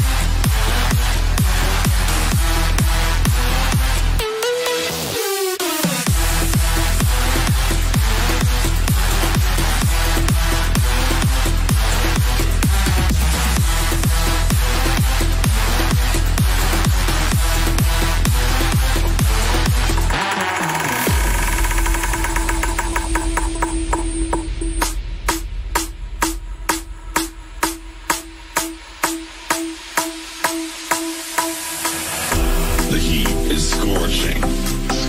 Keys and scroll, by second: 10.8-13.9 typing, 21.7 ctrl+q.